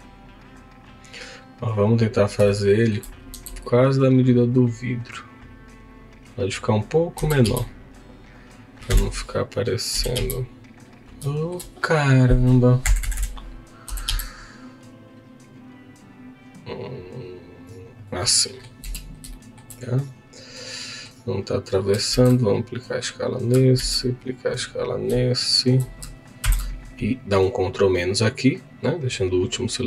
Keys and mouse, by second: 0.5 click, 2.5 shift+middle click, 3.3 s, 5.9 click, 12.8 Escape, 12.8 x, 12.8 s, 13.0 Escape, 13.8 Escape, 13.8 s, 15.0 x, 18.0 click, 18.3 middle click, 18.9 z, 19.3 shift+middle click, 19.9-21.0 middle drag, 21.5 click, 22.1 ctrl+a, 23.9 ctrl+a, 26.5 ctrl+KP_Subtract, 29.2 click.